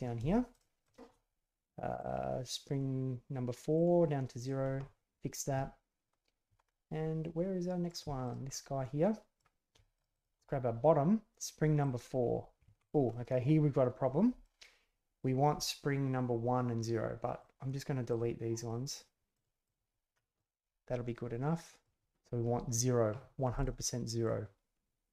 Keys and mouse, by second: 0.5 shift+click, 0.8 shift+click, 2.0 click, 3.8-4.4 drag, 6.6-7.9 middle drag, 8.2 alt+click, 8.5-9.4 middle drag, 9.9 shift+click, 10.1 shift+click, 11.8-12.9 drag, 13.1-14.4 middle drag, 17.4 click, 18.1 click, 20.3-21.8 middle drag, 23.5-24.2 middle drag.